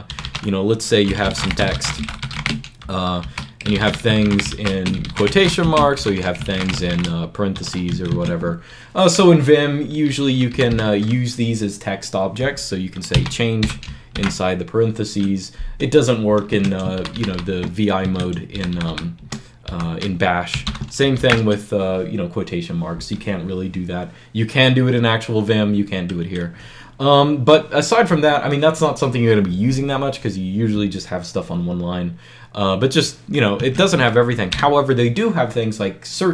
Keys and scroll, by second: 0.0-7.4 typing, 7.8 Escape, 7.9 Escape, 8.5 typing, 10.4 typing, 13.0-14.5 typing, 16.4 Escape, 16.8 shift+v, 17.0 shift+v, 17.2 shift+v, 17.9 Escape, 18.4-21.1 typing, 22.8 typing, 33.4 Escape, 34.4 0.